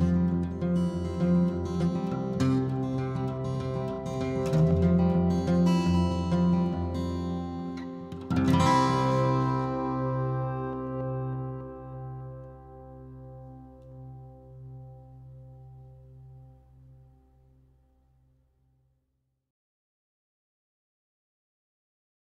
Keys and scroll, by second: 0.0-1.9 typing, 4.9-5.8 typing, 7.5 Delete, 9.9 ctrl+a, 10.8 ctrl+h, 16.9 m.